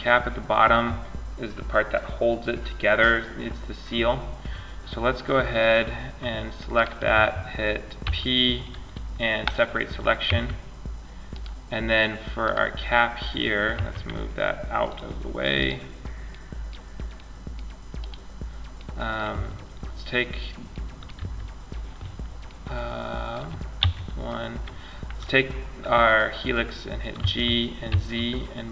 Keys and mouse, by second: 4.8-8.7 drag, 5.9 right click, 7.2 p, 9.5 Tab, 10.5 click, 13.0 m, 17.2-19.4 drag, 20.3 w, 23.0 KP_1, 26.4 g.